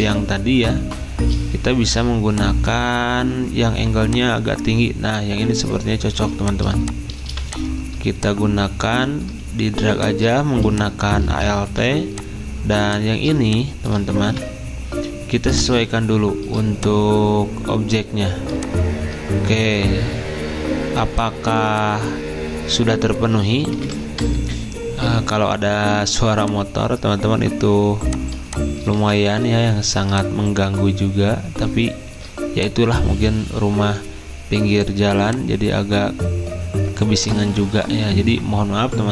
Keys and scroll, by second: 9.4-10.1 typing, 11.7 v, 12.7 z, 14.0-14.7 typing, 24.0-24.7 typing, 25.9 z, 29.0 v.